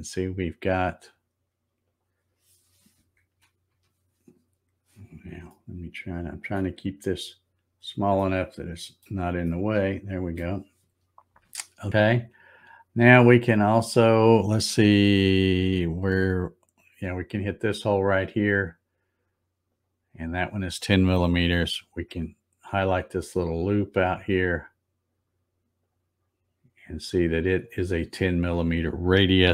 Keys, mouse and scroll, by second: 1.8 click, 3.7 z, 5.5-6.5 shift+middle drag, 6.5 shift+middle click, 7.2-7.5 scroll up 2, 8.1 middle click, 9.4 shift+middle click, 12.6 click, 18.4 click, 19.8 click, 25.9 click, 27.6 click.